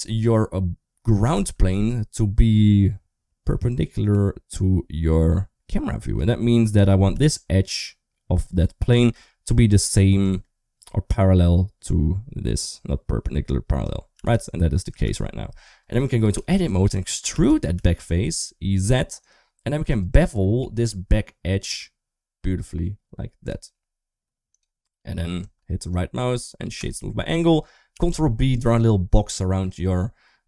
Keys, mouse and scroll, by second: 1.1 r, 7.0 d, 7.2-8.8 drag, 9.0 ctrl+z, 9.6 d, 10.1-13.7 drag, 10.1 d, 13.7 d, 14.0 d, 14.9 ctrl+z, 15.7 Tab, 16.2 2, 16.4 click, 17.2 e, 19.5 2, 19.7 click, 20.5 ctrl+b, 25.3 Tab, 27.8 ctrl+b.